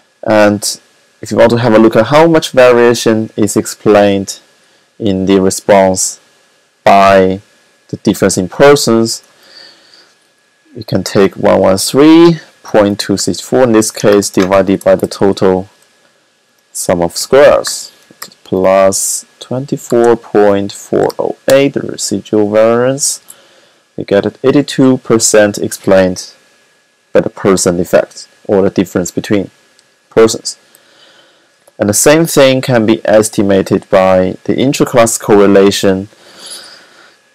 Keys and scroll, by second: 10.7-15.2 typing, 16.4-18.2 typing, 19.3-21.4 typing.